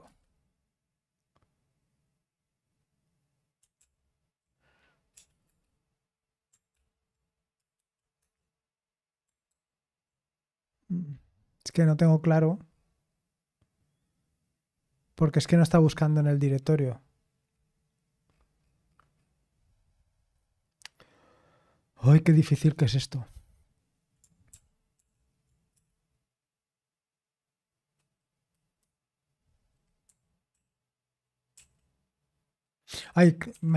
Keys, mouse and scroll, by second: 3.8 ctrl+p, 5.1 BackSpace, 5.4 Return, 6.7 ctrl+p, 7.8 shift+8, 8.2 Return, 19.3-20.6 scroll down 1, 25.0 ctrl+p, 25.7 BackSpace, 29.5 Left, 30.5 Right, 31.5 Right, 32.9 Left, 33.5 -.